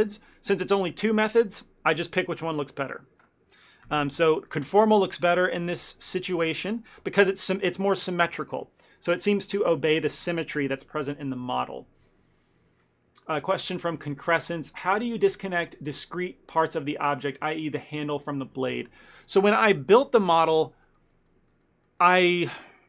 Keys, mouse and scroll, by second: 5.8 shift+middle click, 6.2 ctrl+middle click, 19.4 click, 19.7 middle click, 20.2 shift+middle click, 20.5 ctrl+middle click, 20.9 middle click, 21.2 shift+middle click, 21.6 ctrl+middle click.